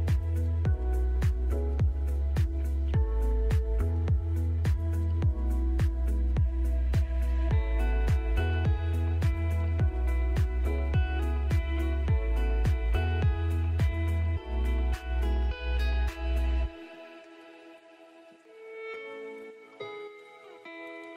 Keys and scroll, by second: 1.0 c, 1.4 Escape, 2.5 ctrl+z, 4.0 shift+F2, 5.3 ctrl+z, 9.7 Escape, 11.7 Escape, 13.2 ctrl+z, 14.6 Escape, 16.1 ctrl+shift+a, 19.2 F3.